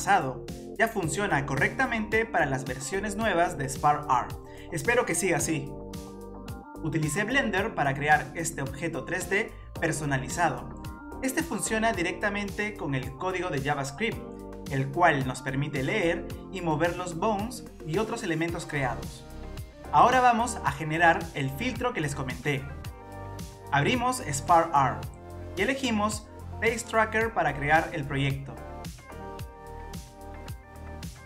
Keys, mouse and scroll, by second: 0.0 click, 0.0 scroll down 5, 0.1 scroll up 4, 0.2 scroll down 1, 0.3 click, 0.5 middle click, 0.7 scroll up 1, 0.8 click, 0.9 shift+click, 1.0 shift+click, 1.1 shift+click, 1.2-3.6 typing, 1.2 click, 1.4 shift+click, 1.4 shift+click, 1.5 shift+click, 1.6 click, 1.7 shift+click, 1.7 shift+click, 1.8 middle click, 1.8 scroll down 4, 1.9 click, 1.9 scroll up 4, 1.9 shift+click, 1.9 shift+click, 1.9 shift+click, 2.1 click, 2.2 middle click, 2.2 middle click, 2.3 shift+click, 2.3 click, 2.4 shift+click, 2.5 shift+click, 2.6 middle click, 2.7 scroll up 3, 2.7 middle click, 2.7 scroll down 1, 2.9 shift+click, 3.0 middle click, 3.1 scroll up 1, 3.2 scroll down 2, 3.3 click, 3.4 shift+click, 3.4 shift+click, 3.5 shift+click, 3.5 shift+click, 3.6 shift+click, 3.7 click, 3.8 shift+click, 3.8 click, 3.8 middle click, 3.8-4.3 scroll down 15, 4.0 click, 4.0 middle click, 4.2 click, 4.3 scroll up 1, 4.3 scroll down 2, 4.4 middle click, 4.4 scroll down 3, 5.0 click, 5.2 click, 5.3 click, 5.4 click, 5.6 scroll up 3, 5.7 middle click, 5.7 scroll down 5, 6.1 click, 6.5 scroll up 7, 6.6 click, 6.7 click, 6.8 middle click, 7.0 click, 7.1 click, 7.1 scroll down 3, 7.2 click, 7.3 click, 7.4 middle click, 7.5 click, 7.5 middle click, 7.5 click, 7.5 scroll up 2, 7.6 click, 7.7 click, 7.7 click, 7.8 middle click, 7.9 click, 8.1 click, 8.1 click, 8.4 click, 8.5 click, 8.6 middle click, 8.7 scroll down 6, 8.7 click, 8.9 click, 9.0 click, 9.0 middle click, 9.1 click, 9.5 click, 9.7 click, 9.8 click, 10.0 scroll down 1, 10.0 click, 10.1 shift+d, 10.3 click, 10.4 Delete, 10.5 middle click, 10.6-10.9 click, 10.7 click, 10.7 click, 10.8 click, 10.9 middle click, 11.0 click, 11.0 click, 11.1 click, 11.1 click, 11.2 scroll up 2, 11.4 scroll down 2, 11.5 click, 11.7 middle click, 11.9 click, 12.0 click, 12.2 click, 12.2 shift+d, 12.3 click, 12.4 click, 12.4 middle click, 12.5-13.6 click, 12.5 click, 12.7 click, 12.9 middle click, 13.0 click, 13.1 middle click, 13.1 click, 13.8 shift+d, 13.9 middle click, 14.0 click, 14.1 middle click, 14.2 middle click, 14.5 click, 14.6 click, 14.7 click, 14.8 click, 15.0 click, 15.0 middle click, 15.4 click, 16.1 click, 16.1 a, 16.9 click, 17.0 click, 17.1 middle click, 17.3 r, 17.9 click, 18.1 r, 18.9 middle click, 19.4 click, 19.6 r, 20.4 middle click, 21.3 click, 22.0 click, 22.2 click, 22.3 click, 22.4-22.7 scroll down 7, 22.5 click, 22.7 click, 22.9 click, 23.0 middle click.